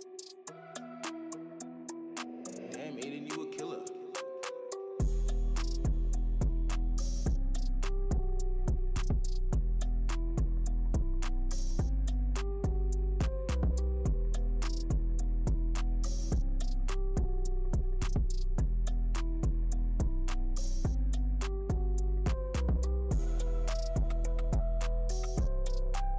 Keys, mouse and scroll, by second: 0.8 click, 1.5 q, 1.9 alt+middle click, 2.7 space, 3.5 click, 4.2 space, 4.6 alt+click, 4.8 alt+middle click, 5.1 alt+click, 5.2 alt+middle click, 5.4 alt+click, 5.6 alt+middle click, 5.9 click, 7.8 shift+Num_Lock, 7.8 shift+right click, 8.6 alt+middle click, 9.1 click, 10.4 shift+right click, 11.0 alt+middle click, 11.4 click, 12.2 shift+right click, 12.7 alt+middle click, 13.1 click, 16.0 click, 17.6 alt+Num_Lock, 17.6 alt+middle click, 18.1 scroll up 1, 18.7 right click, 19.1 click, 19.7-21.0 shift+drag, 21.0 shift+click, 21.7 Return, 22.3-23.6 shift+drag, 23.6 Return, 24.2 shift+click, 24.9 shift+click, 25.8 Return.